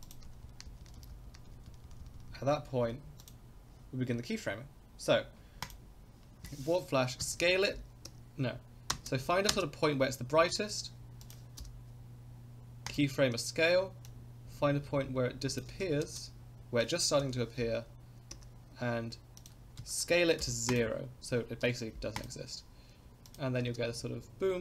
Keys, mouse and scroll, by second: 0.0 click, 0.3 Left, 0.4 Left, 0.7 Right, 0.8 Right, 1.0 Right, 1.1 Right, 1.3 Right, 1.5 Right, 1.7 Right, 1.9 Right, 2.0 Right, 2.2 Right, 2.3 Right, 2.8 Left, 3.2 click, 5.6 click, 7.2 s, 8.9 space, 9.5 space, 10.7 s, 11.6 i, 14.0-15.6 drag, 15.6 space, 16.0 space, 17.2 i, 19.4 drag, 19.8 s, 21.6 i, 23.3 click, 23.6 space.